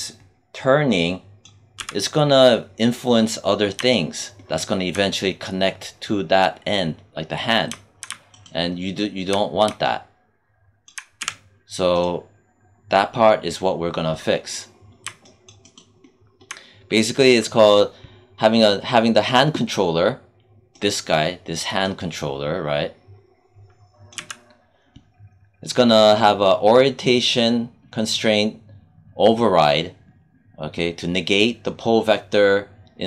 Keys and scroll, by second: 1.6 z, 11.1 z, 24.0 z.